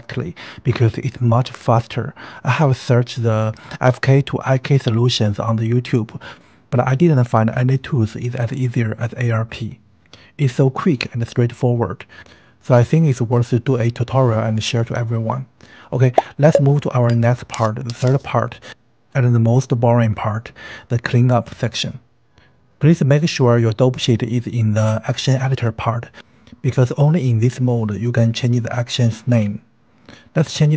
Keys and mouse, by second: 5.0 space, 6.3-7.8 drag, 18.1-19.2 drag, 21.0-29.9 drag.